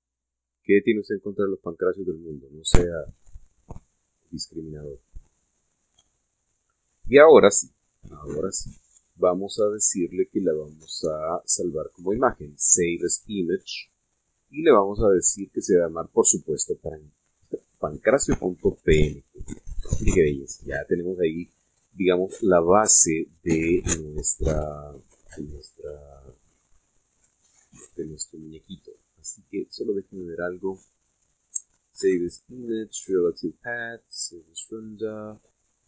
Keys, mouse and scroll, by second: 1.5 click, 2.6-3.2 scroll down 2, 4.0-5.1 shift+middle drag, 5.2 shift+scroll up 2, 5.8-7.2 middle drag, 9.0 click, 14.2 click, 20.2 click, 27.7 click, 28.2 click, 30.6 click.